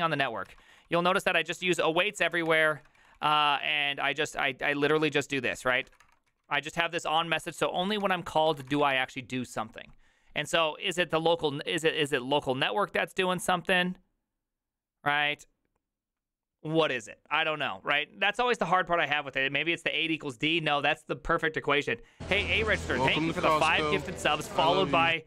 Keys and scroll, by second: 0.0-9.2 typing, 0.5 ctrl+u.